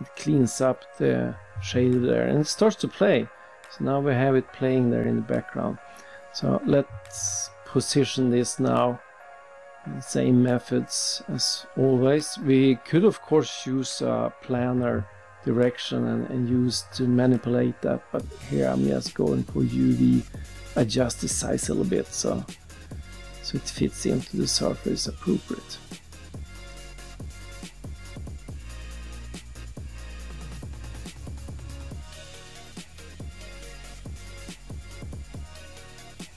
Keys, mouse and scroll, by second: 0.1 click, 1.3 click, 4.3 click, 6.0-6.7 scroll down 3, 7.5 scroll up 3, 8.2 click, 9.5 click, 9.9-10.3 scroll down 2, 10.9 click, 13.0 click, 13.5 1, 14.0 Return, 19.0 click, 19.5-21.2 typing, 21.7 click, 23.9 click, 24.7-26.8 typing, 25.4 click, 28.1 click, 29.1-30.3 typing, 30.5 Return, 31.1 click, 31.5-32.2 typing, 36.0 click.